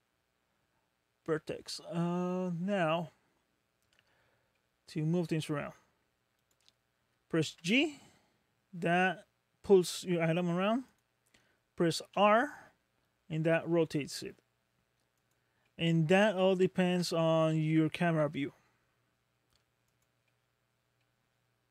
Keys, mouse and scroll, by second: 4.6 middle click, 6.4 click, 7.5 g, 12.1 r, 12.2 r, 15.7 middle click, 16.8-17.5 scroll down 5, 17.5 middle click, 18.3 r, 20.2 middle click, 21.0 middle click.